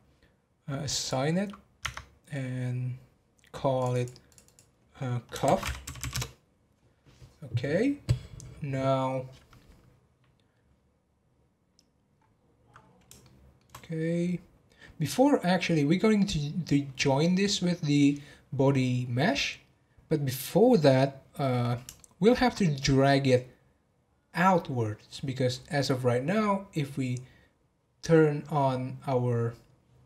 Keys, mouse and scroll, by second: 0.9 click, 1.8 Tab, 3.8 click, 3.9 click, 4.3 click, 4.4-6.0 drag, 6.0 f, 12.1 scroll up 1, 13.2-16.3 shift+middle drag, 21.9-25.0 shift+middle drag, 26.7-27.9 scroll up 1.